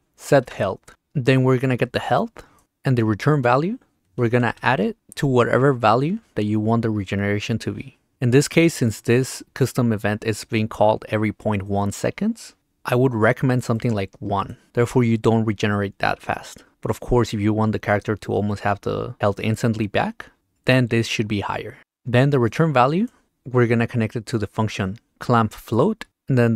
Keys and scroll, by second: 0.0-0.4 typing, 0.4 Return, 4.3 d, 14.6 1, 25.1 p.